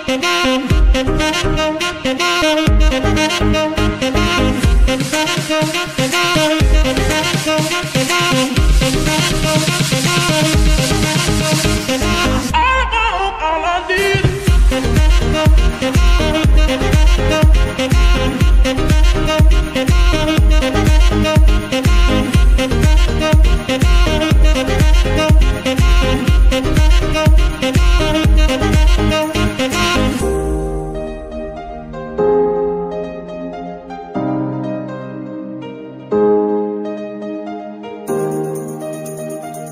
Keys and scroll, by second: 2.8 s, 2.8 x, 6.8 Tab, 8.7 shift+s, 10.5 Tab, 16.4 BackSpace, 16.5 BackSpace, 16.8 BackSpace, 17.9 w, 19.4 Return, 22.5 s, 32.3 KP_3, 34.1 y.